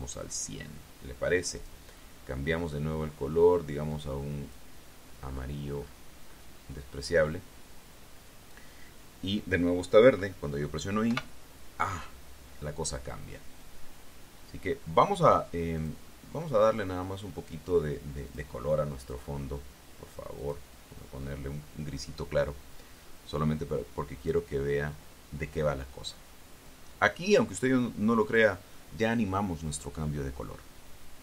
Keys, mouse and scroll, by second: 2.4 click, 4.7 click, 6.1-6.9 scroll up 2, 7.1-7.5 scroll up 2, 11.9 i, 16.6 click, 19.1 click, 19.8 click, 21.2 click, 25.0 click, 27.5-29.3 drag.